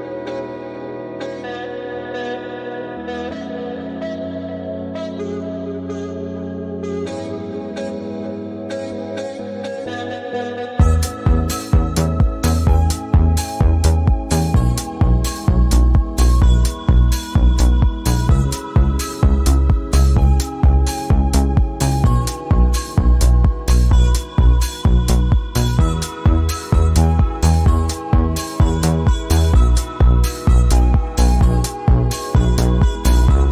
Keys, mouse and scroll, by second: 0.8 Up, 2.2 click, 3.8 alt+scroll down 1, 4.6 space, 4.7 click, 5.3-6.0 alt+scroll up 3, 6.8 click, 9.2 right click, 9.5-15.8 drag, 15.8 ctrl+z, 16.6 click, 18.7 v, 19.4-24.4 drag, 24.4 space, 24.5 click, 24.6 space, 27.6 click, 29.8-33.1 drag, 33.1 right click.